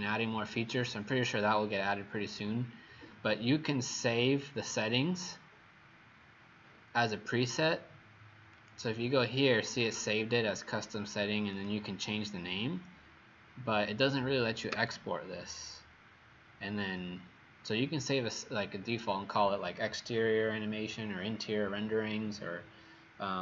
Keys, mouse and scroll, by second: 8.5 click, 14.7 Escape.